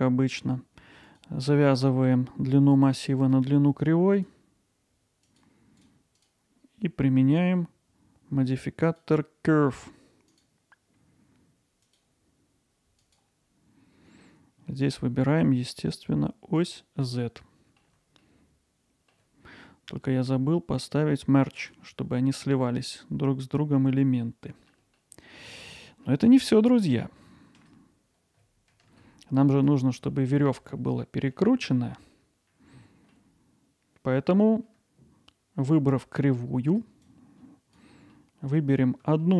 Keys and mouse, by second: 1.2-3.3 drag, 8.9-10.4 drag, 11.9 click, 14.8-16.8 drag, 17.2-17.8 middle drag, 18.2 alt+middle click, 21.6 click, 24.2 middle click, 24.9-25.6 alt+middle drag, 25.8 middle drag, 30.1 alt+middle click, 31.4-33.1 alt+middle drag, 37.2-37.8 drag, 38.2-38.8 middle drag, 39.2-39.3 middle drag.